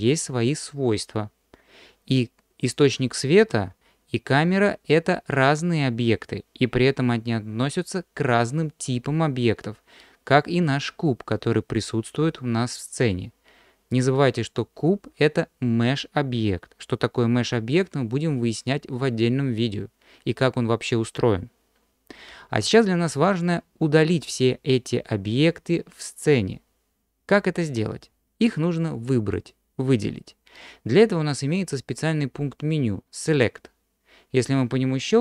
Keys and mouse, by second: 35.1-35.2 drag.